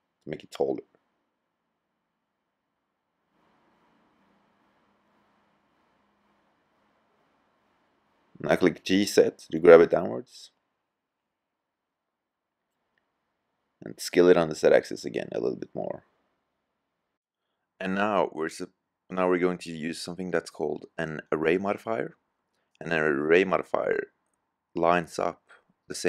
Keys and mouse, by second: 5.3 middle click, 8.6 g, 12.2-12.7 drag, 12.7 s, 13.0-14.0 middle drag, 17.1-18.6 middle drag.